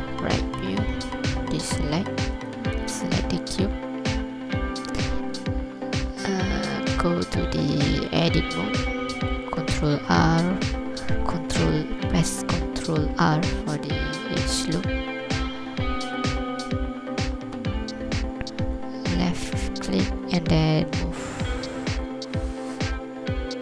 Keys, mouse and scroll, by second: 1.4 alt+a, 2.3 right click, 4.4 alt+a, 7.0 Tab, 9.9 ctrl+r, 23.4 scroll up 1.